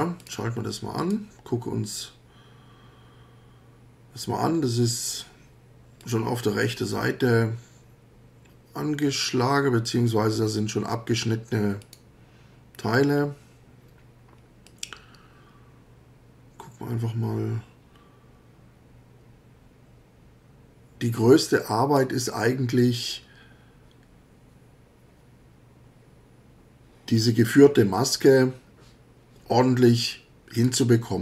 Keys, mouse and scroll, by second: 0.2 click, 1.0 click, 6.0 click, 9.0 click, 11.8 click, 14.7-22.2 drag, 30.6 click.